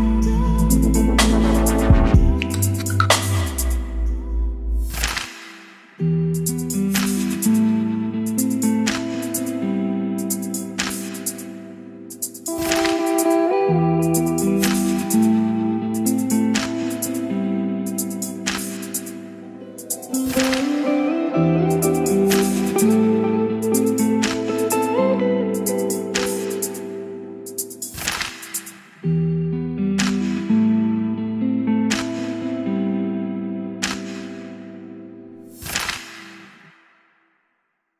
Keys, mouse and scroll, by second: 0.3 Return, 2.7-3.7 drag, 3.9 ctrl+c, 4.4 click, 5.0 ctrl+v, 5.9 ctrl+r, 6.7-11.3 drag, 11.3 middle click, 12.2-26.6 drag.